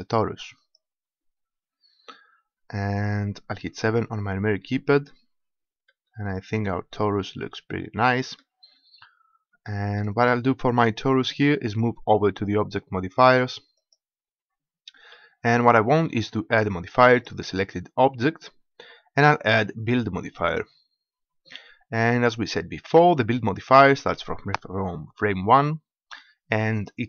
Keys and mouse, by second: 3.8 KP_7, 5.9 middle click, 13.8-15.5 drag, 15.5-17.1 middle drag, 17.1-19.0 drag, 19.0-23.3 middle drag.